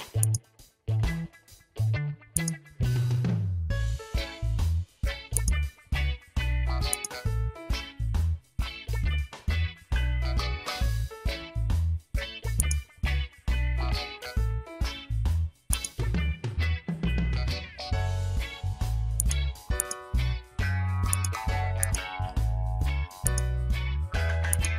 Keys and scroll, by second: 3.5 ctrl+a, 8.2 Return.